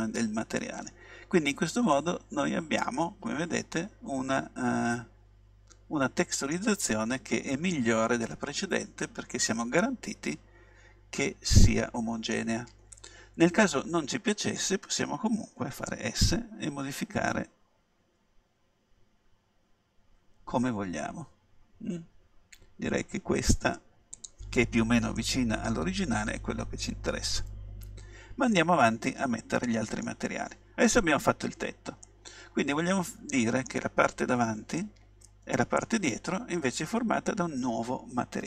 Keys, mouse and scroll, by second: 2.0-4.9 middle drag, 7.8-9.7 middle drag, 14.2-15.9 middle drag, 15.9 s, 24.3-26.2 drag, 25.2 middle click, 26.2 middle click, 28.6-30.3 middle drag, 32.1-33.8 middle drag, 34.8-36.7 middle drag.